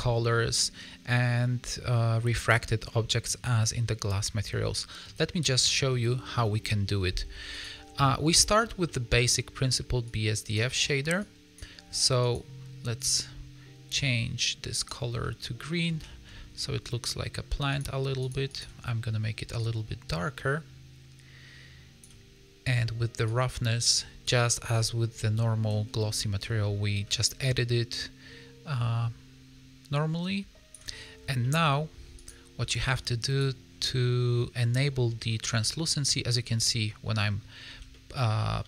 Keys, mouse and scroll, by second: 0.4 scroll up 2, 2.8 middle click, 3.9 scroll down 2, 4.2 middle click, 5.3 middle click, 7.4 click, 8.8 middle click, 9.4-10.0 scroll up 4, 10.0 click, 11.1 click, 11.8-12.1 scroll up 3, 12.1 click, 15.1 middle click, 16.0 shift+middle click, 16.2-17.1 scroll up 3, 17.6 click, 18.4 click, 23.2 click, 25.0 scroll down 3, 26.0 scroll up 2, 27.4 click, 31.1 scroll down 4, 31.3 middle click, 32.1 click, 32.9 click, 33.6 scroll down 2, 33.7 middle click, 35.2 shift+middle click, 35.5 middle click, 36.1 scroll up 1, 36.4 middle click, 37.6 a, 37.8 middle click, 38.6 a.